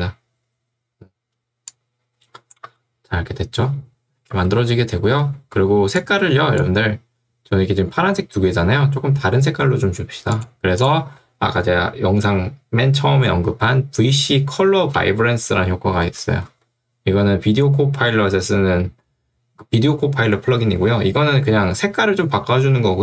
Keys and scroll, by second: 2.7 space, 15.1 ctrl+space, 16.1 v, 16.5 c.